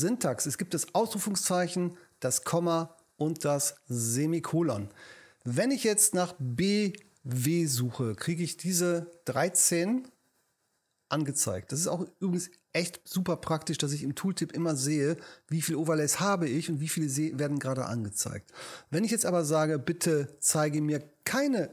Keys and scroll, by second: 7.2 b, 7.7 w, 19.8 Left.